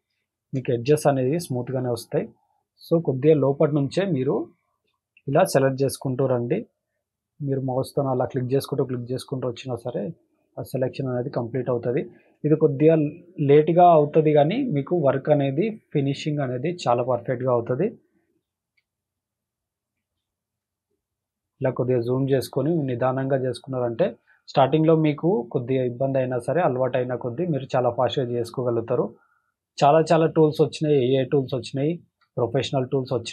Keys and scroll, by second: 0.0 space, 0.5 space, 4.6 space, 5.1 space, 7.9 space, 8.4 space, 11.7 space, 12.2 space, 14.7 space, 15.2 space, 16.7 space, 17.2 space, 18.8 space, 19.9 space, 20.4 space, 23.8 space, 24.3 space, 27.0 space, 27.5 space, 29.5 space, 30.1 space, 31.5 space, 32.1 space.